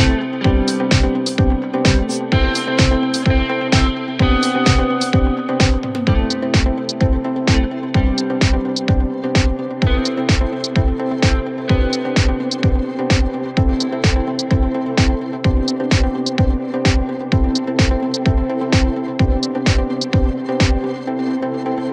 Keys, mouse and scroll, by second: 1.8 Tab, 3.2-5.1 drag, 5.1 scroll down 2, 5.4-5.9 middle drag, 5.9-7.1 scroll up 1, 7.1 ctrl+2, 8.8 scroll up 4, 9.1 scroll down 3, 9.4-10.6 middle drag, 10.6 Tab, 11.3 g, 13.1 Tab, 13.9 KP_Divide, 14.6-15.4 middle drag, 15.4-16.7 scroll up 2, 16.7 click, 17.1-17.6 scroll up 1, 17.6 Tab, 18.6 3, 18.9 click, 19.1 click, 19.5 middle click, 20.3-20.9 scroll up 2, 20.9-21.9 scroll down 1.